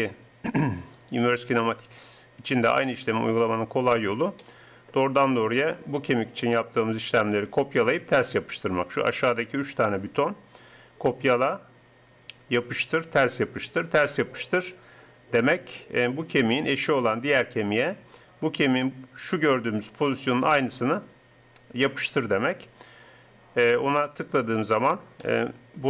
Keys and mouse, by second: 0.9-2.9 drag, 3.5-7.7 drag, 9.6-24.1 middle drag.